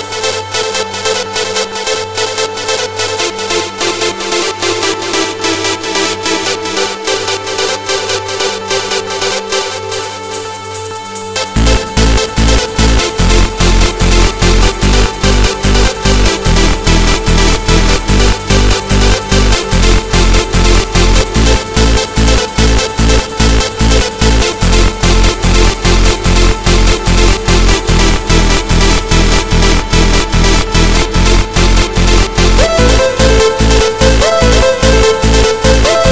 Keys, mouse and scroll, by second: 0.9 click, 3.8 click, 23.8 click, 24.8 click, 28.4 click, 30.1 click.